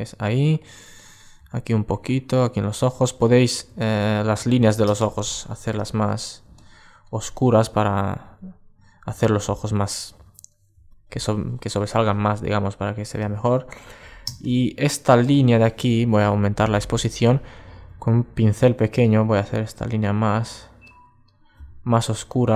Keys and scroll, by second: 2.6 super+space, 13.8 super+space.